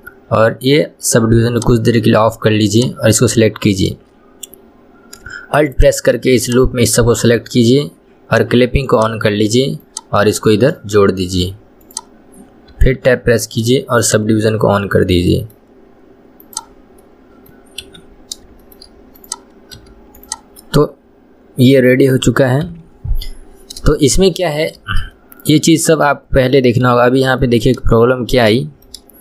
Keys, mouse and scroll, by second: 1.8 click, 3.0-4.2 drag, 4.2 scroll up 2, 6.0 alt+click, 6.7 alt+click, 9.2 click, 10.1 click, 12.1 click, 13.1 Tab, 14.7 click, 15.5-16.8 middle drag, 16.8 click, 17.3 middle click, 18.1 KP_1, 18.5 scroll down 1, 18.9-19.5 shift+middle drag, 19.5 click, 20.1 h, 20.5 click, 20.9-23.0 middle drag, 23.0 KP_1, 23.3-23.7 scroll up 2, 24.3-24.9 shift+middle drag, 24.9 scroll down 2, 25.5-27.2 middle drag, 27.2 KP_1, 27.7 shift+middle click, 28.5-29.0 scroll up 1, 29.0-29.2 shift+middle drag.